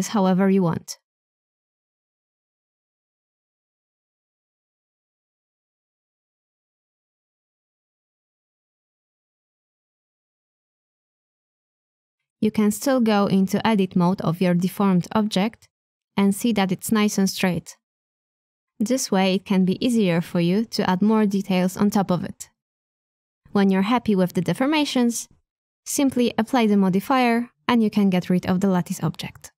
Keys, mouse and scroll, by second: 0.6 b, 1.6-3.6 middle drag, 10.1 Tab, 10.8-14.1 middle drag, 15.4 h, 15.7 middle click, 16.6 click, 17.3 Tab, 17.9 a, 18.0 a, 18.3-19.9 middle drag, 20.0 Tab, 20.4-24.0 middle drag, 26.2 middle click, 27.1 Tab, 27.1-28.9 middle drag, 29.5 Tab.